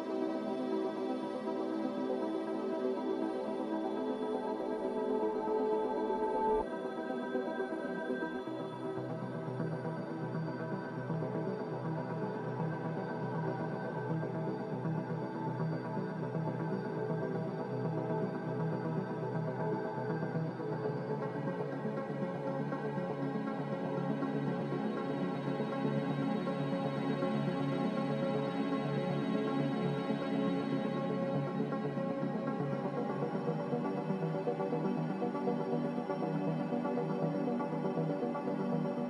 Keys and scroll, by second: 3.7 \, 4.4 \, 4.8 Escape, 5.0 Escape, 5.7 Escape, 13.9 a, 24.5 typing, 26.8 typing, 28.9 typing, 32.0-32.8 typing, 34.4 typing.